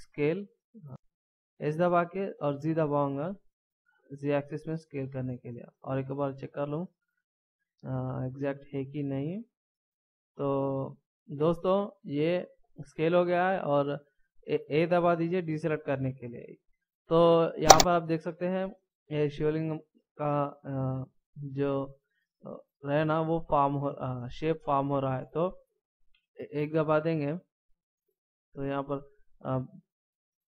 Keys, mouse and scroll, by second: 1.5 s, 5.3 middle click, 9.5 s, 15.0 a, 15.9 middle click, 17.0 scroll down 1, 26.1 KP_1.